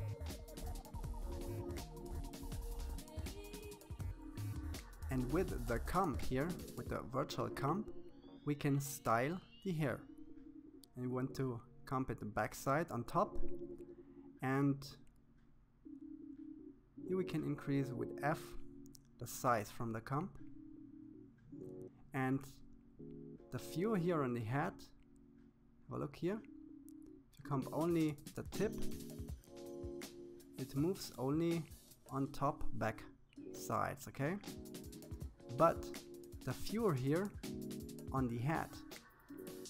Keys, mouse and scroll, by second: 3.7 KP_3, 4.3-5.1 scroll up 3, 5.1-7.4 shift+middle drag, 8.5-10.1 middle drag, 12.9 KP_3, 13.7-14.5 scroll up 2, 14.5-15.7 shift+middle drag, 15.7 f, 17.0-18.0 scroll up 4, 18.0-19.3 shift+middle drag, 19.3 f, 21.7-23.3 drag, 27.2-30.1 drag, 30.6 ctrl+z, 32.0 ctrl+z, 32.9 ctrl+z, 34.1-35.2 scroll down 2, 35.2 scroll down 1, 35.4 f, 37.4-38.9 drag.